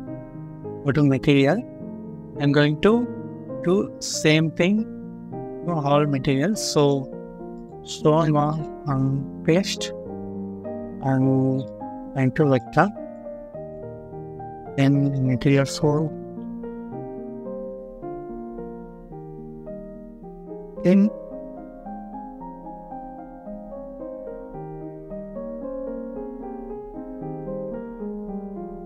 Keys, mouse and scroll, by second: 7.8 middle click, 9.8 scroll up 1, 13.9 scroll down 1, 16.5 middle click, 16.5 scroll down 1, 17.0 scroll up 1, 21.4-22.1 scroll down 1, 22.1 middle click, 23.7 middle click, 24.0-24.7 scroll up 1, 27.6 scroll down 1.